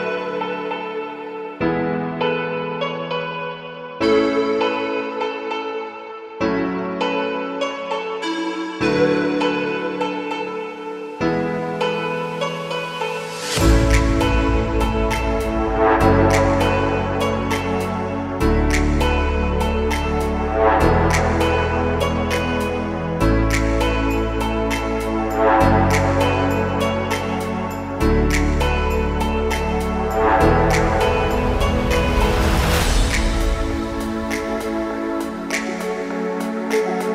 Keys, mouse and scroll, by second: 1.0-3.3 drag, 5.5-7.7 middle drag, 8.4 scroll down 2, 9.6-10.6 shift+middle drag, 11.2 Tab, 11.5-11.8 scroll down 1, 11.8-14.6 middle drag, 14.6 2, 15.5 alt+click, 16.4-17.1 middle drag, 17.9 alt+shift+click, 18.9 alt+shift+click, 19.5-21.7 right drag, 21.7-23.0 middle drag, 23.2 alt+click, 23.7-25.4 right drag, 25.4-26.2 middle drag, 26.2 scroll up 1, 26.8 scroll up 1, 27.4 click, 27.7-28.3 middle drag, 29.2 ctrl+click, 30.0-32.0 right drag, 32.0-34.6 middle drag, 34.8 alt+click, 35.1-35.5 middle drag, 35.8 alt+shift+click, 36.1-37.1 middle drag.